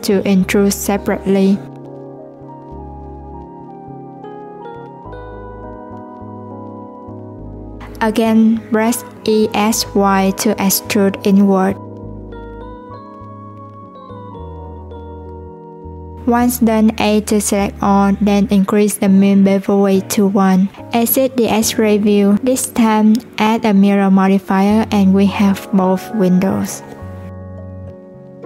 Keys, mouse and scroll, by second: 6.7-8.7 middle drag, 8.7 e, 18.5-19.7 drag, 19.7 Tab, 20.4 alt+z, 20.8 middle click, 21.6-22.4 scroll up 1, 22.4 click, 23.8-26.3 drag.